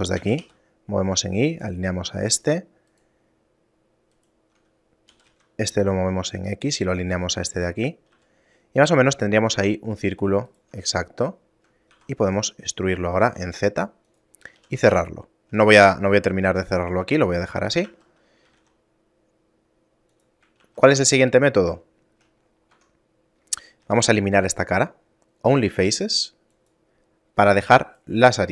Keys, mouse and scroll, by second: 0.2 g, 2.0 middle click, 2.4-2.9 scroll down 1, 2.9 right click, 3.4 middle click, 4.2 right click, 5.2 g, 7.6 middle click, 7.8 scroll down 3, 8.2 a, 8.5 middle click, 9.4 ctrl+Tab, 10.5 alt+right click, 11.0 shift+middle click, 12.0 e, 14.6 f, 14.8 a, 15.1 shift+middle click, 16.6 scroll down 4, 17.0 Tab, 17.7 a, 18.5 g, 20.6 shift+a, 22.0 shift+middle click, 22.4-23.0 scroll up 4, 22.8 Tab, 23.8 x, 27.9 right click.